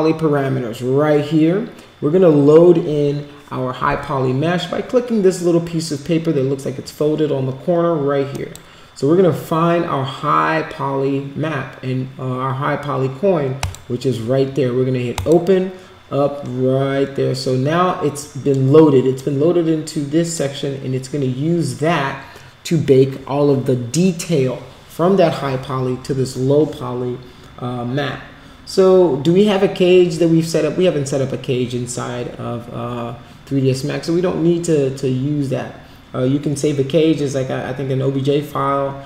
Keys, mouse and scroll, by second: 8.3 click, 13.6 click, 15.1 click, 19.1-20.3 drag.